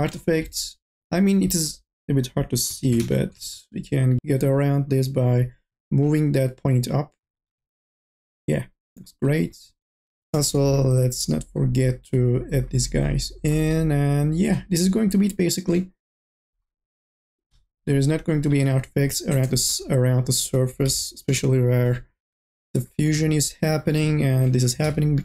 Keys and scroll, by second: 3.1 ctrl+z, 10.3 k, 10.6 l, 20.5 n, 21.0 b, 22.5-25.0 typing.